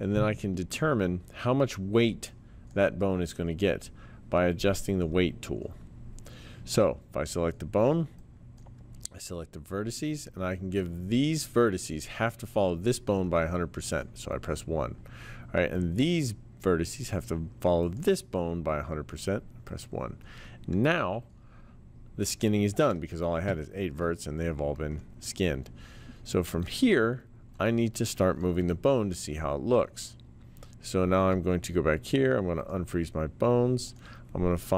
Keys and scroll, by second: 28.6 t.